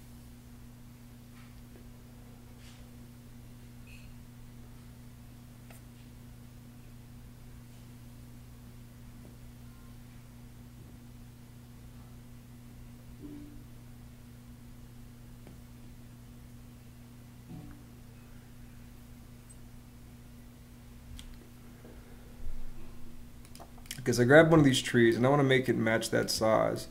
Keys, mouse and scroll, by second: 24.1 Escape, 26.8 Escape.